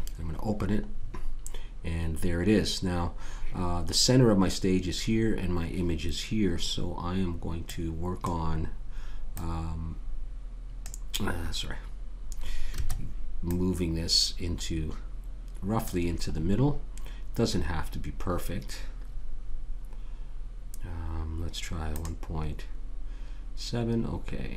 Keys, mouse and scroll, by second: 1.5-3.0 middle drag, 3.0-4.8 scroll down 1, 7.6-11.1 drag, 13.5-15.1 drag, 17.9-18.5 scroll up 1, 18.5-20.8 scroll down 1, 22.0-24.5 drag.